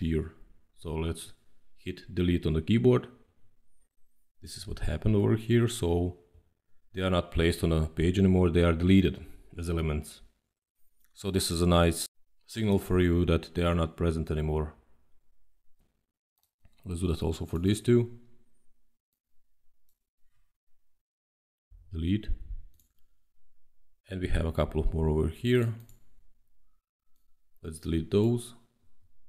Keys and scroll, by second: 3.1 Delete, 21.6 Delete, 28.7 Delete.